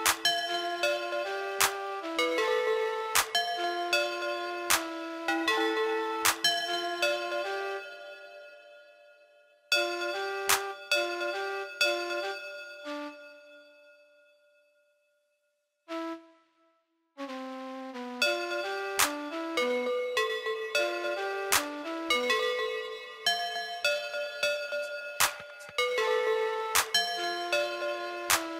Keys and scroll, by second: 27.2 ctrl+c, 27.7 ctrl+b.